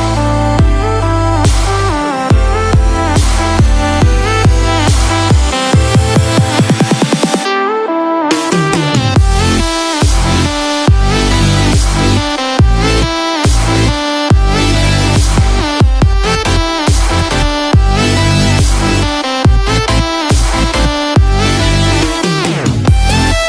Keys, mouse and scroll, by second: 2.7 click, 8.5 click, 17.3 click, 17.3-18.1 scroll down 2, 17.7-18.3 scroll up 2.